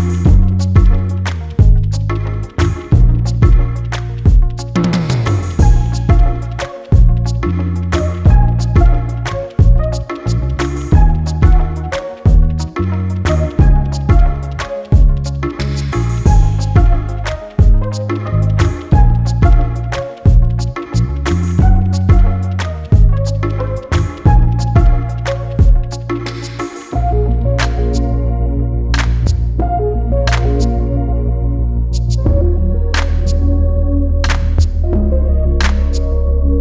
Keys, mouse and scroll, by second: 1.4 click, 6.3 click, 7.6 click, 10.5 click, 12.0 click, 13.6 click, 14.4 scroll down 1, 14.8 scroll up 1, 15.7 click, 16.2-16.9 scroll down 1, 19.3 click, 21.3 scroll down 1, 22.5 click, 23.3 scroll up 1, 23.7 click, 26.4 click, 26.9 scroll up 1, 27.8 ctrl+s, 28.4 scroll down 1, 28.8-29.4 scroll up 1, 29.9 click, 32.0 click, 35.0 scroll up 1, 35.4 click.